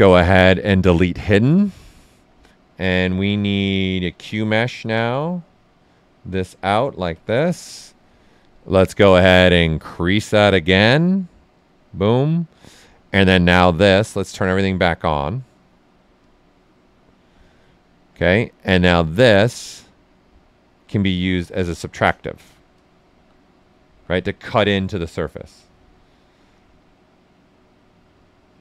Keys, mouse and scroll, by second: 1.2 click, 3.0 space, 5.5-8.5 drag, 8.5-10.3 drag, 10.3-15.8 drag, 16.1-20.9 drag, 23.1 shift+f, 24.4 w, 24.8-26.5 ctrl+right drag, 26.5-28.0 drag, 28.0-28.6 drag.